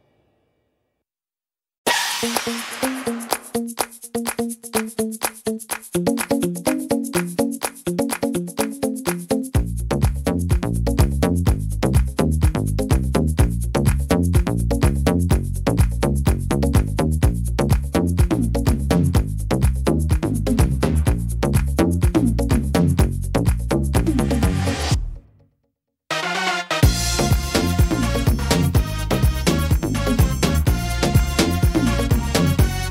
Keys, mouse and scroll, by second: 0.3-0.9 scroll down 4, 0.9 middle click, 1.4-2.2 scroll up 1, 2.2 right click, 2.2-3.1 scroll up 1, 3.1 l, 10.9 click, 10.9 middle click, 12.9 ctrl+z, 13.8 ctrl+z, 15.6 click, 16.6 s, 20.2 middle click, 20.2 click, 22.3 s, 26.1 click, 26.1 s, 29.5 click, 29.5 middle click, 30.2-31.1 scroll up 1, 31.1 click.